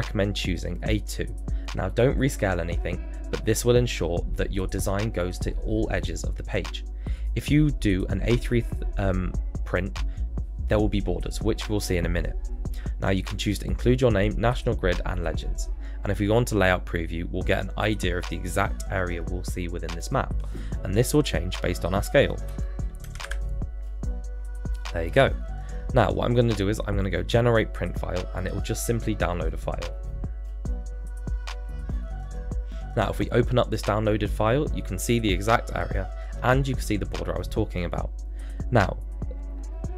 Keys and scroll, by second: 23.0 BackSpace, 23.2 6.